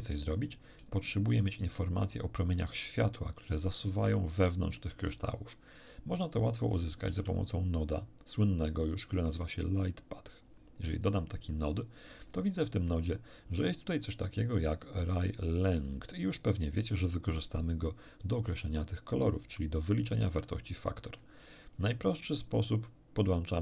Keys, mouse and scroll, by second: 6.9 shift+a, 10.4 click, 12.2 click, 12.6-13.1 scroll up 2, 20.4 middle click, 21.0-21.4 scroll up 2, 21.7-22.6 drag, 23.4-23.6 drag.